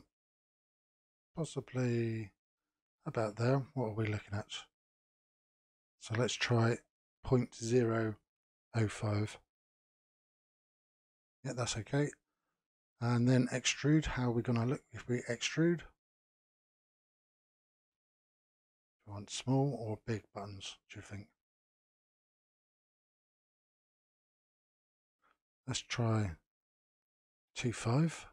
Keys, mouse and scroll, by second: 2.8-4.8 middle drag, 4.8-7.9 drag, 10.6-15.5 middle drag, 15.5-18.5 drag, 23.2-25.4 middle drag, 25.4-28.3 drag.